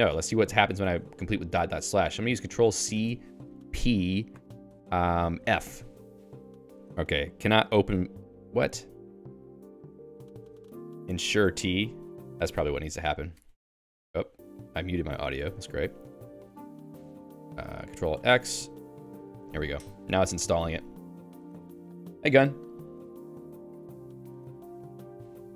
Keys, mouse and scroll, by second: 8.4 Escape, 8.9 j, 9.2 j, 10.3-12.8 typing, 16.0 Escape.